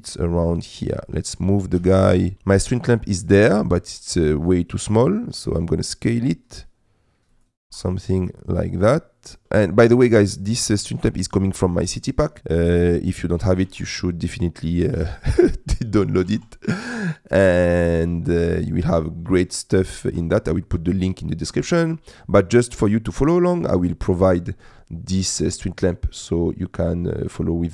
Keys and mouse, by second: 1.1 middle click, 1.9 g, 2.1 shift+z, 4.0 s, 7.7 r, 9.4 g, 9.4 z, 12.8 middle click, 13.7 r, 13.8 z, 15.0 g, 15.4 shift+z, 16.3 r, 16.4 z, 18.0 click, 18.9 g, 19.4 shift+z, 20.1 r, 20.3 z, 22.8 middle click.